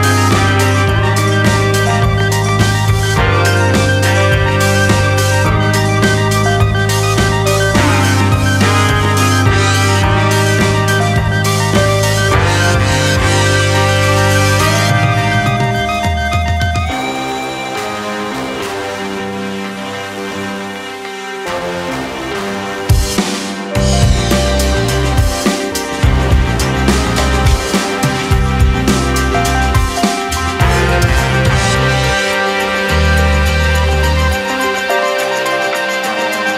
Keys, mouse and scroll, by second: 1.1 shift+z, 1.5-2.5 scroll up 3, 2.5 shift+middle click, 3.3-3.9 scroll down 1, 3.9 shift+z, 4.2-5.8 scroll up 4, 4.5 shift+z, 5.8 KP_3, 6.2-6.8 scroll down 2, 6.8 Tab, 7.4 r, 8.9 Tab, 9.1-10.6 middle drag, 11.3 KP_3, 11.6-12.4 scroll up 2, 12.4-13.0 scroll up 1, 13.0-14.0 drag, 14.0-14.5 scroll down 1, 14.5 g, 17.6-19.1 middle drag, 19.1 scroll down 1, 19.3 scroll up 3, 19.5 middle click, 19.8-20.4 scroll down 1, 20.4 KP_1, 22.2 middle click, 22.6-24.0 scroll up 6, 24.0-25.0 middle drag, 25.0 scroll down 1, 26.3 click, 26.9 ctrl+r, 28.0-28.4 scroll up 3, 28.9 click, 29.5 3, 29.5 click, 29.7 middle click, 29.7-30.3 scroll down 2, 30.3 KP_1, 31.7 e, 34.6 s, 35.2 middle click, 35.9 KP_1, 36.4 g.